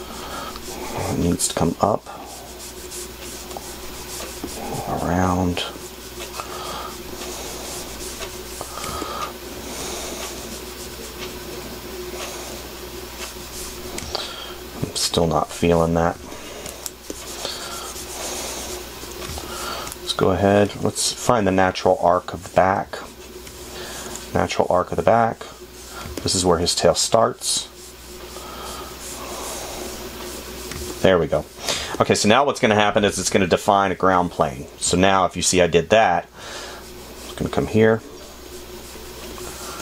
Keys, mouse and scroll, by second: 21.0 space, 35.3 space.